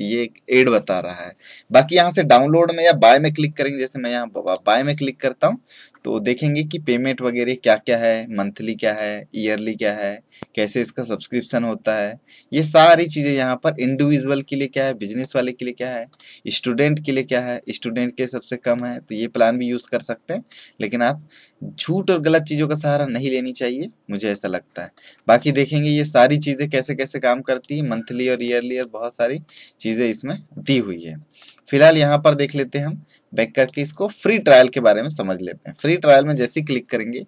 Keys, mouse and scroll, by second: 4.4 click, 8.9-15.1 drag, 18.7-33.4 drag, 21.9-23.3 scroll down 1, 33.6 click, 35.7 click.